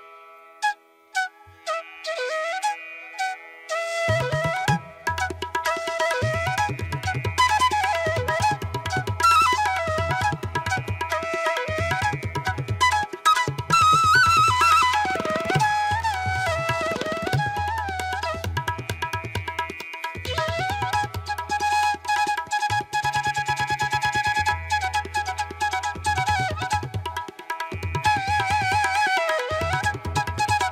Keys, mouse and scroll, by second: 1.3 space, 3.1 ctrl+alt+z, 3.5 space, 9.6 space, 10.4 ctrl+alt+z, 13.4 ctrl+=, 15.2 ctrl+-, 15.8 space, 16.0 ctrl+=, 17.6 ], 22.0 ctrl+alt+z, 23.1 ctrl+=, 23.5 ctrl+-, 24.1 ctrl+-, 24.4 space, 24.7 ctrl+-, 24.8 ], 25.5 ], 26.3 ], 28.3 space.